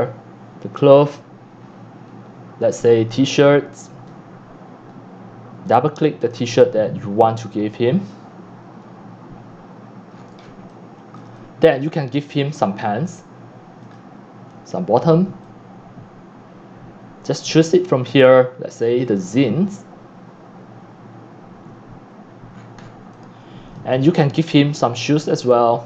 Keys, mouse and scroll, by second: 2.6 scroll down 1, 4.1-4.4 scroll down 1, 6.3 click, 6.5 click, 7.0-7.5 drag, 10.0 click, 10.1-10.6 scroll down 15, 10.8-12.5 typing, 12.3 click, 12.7 scroll, 14.0 click, 14.7-17.4 drag, 18.7 click, 22.5-22.8 scroll down 8, 23.9-25.1 typing, 25.3-25.8 drag.